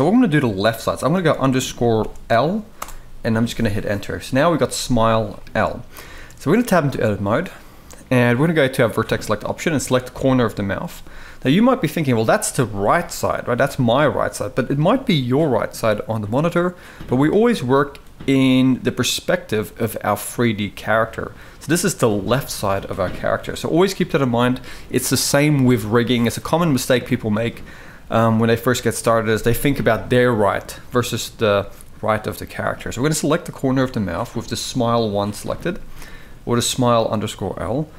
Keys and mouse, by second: 5.1 shift+middle drag, 5.9 shift+middle click, 6.3 Tab, 6.7-7.1 middle drag, 8.7 click, 9.8 click, 13.2 g, 17.0-18.5 middle drag, 20.8-22.6 middle drag, 23.1 KP_1, 28.3 shift+middle drag, 33.6-33.9 shift+middle drag, 35.7-36.0 shift+middle drag.